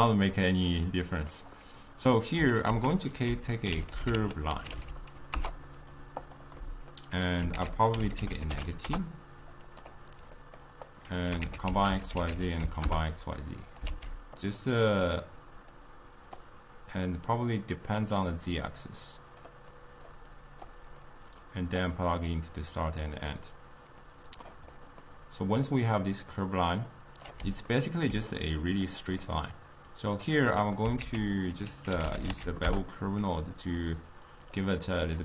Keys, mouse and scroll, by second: 0.8-13.9 middle drag, 13.9 shift+d, 16.4-18.1 drag, 19.5 click, 21.8-23.1 drag, 26.7 click, 27.8-33.8 ctrl+middle drag, 33.8 ctrl+a, 35.0-35.2 middle drag.